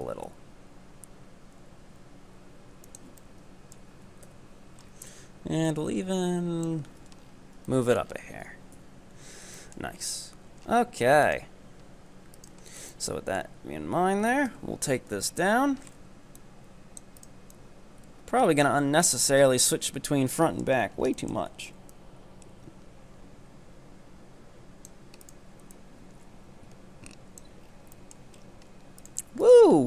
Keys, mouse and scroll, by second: 3.2-3.8 middle drag, 3.8-4.3 scroll down 1, 4.3 KP_1, 4.8-5.7 scroll up 4, 5.7-7.1 drag, 7.1 Tab, 7.2-8.8 scroll down 13, 7.7-8.0 middle drag, 8.8 KP_7, 9.4-9.7 scroll down 3, 9.7-10.0 shift+middle drag, 10.0-10.9 scroll up 10, 10.4 Tab, 11.3 right click, 12.4 ctrl+right click, 12.7 scroll down 4, 13.0-14.3 shift+middle drag, 14.3 e, 15.6 z, 16.0-16.4 scroll up 3, 16.4 click, 17.2 right click, 17.6-19.2 drag, 19.2 ctrl+right click, 19.7 KP_3, 20.4 shift+middle click, 20.7-21.2 scroll up 1, 21.2 shift+middle click, 22.0-25.0 drag, 25.2 right click, 25.7-27.7 drag, 27.7 scroll down 4, 27.7 shift+middle click, 28.4-29.0 scroll up 4, 29.0 right click.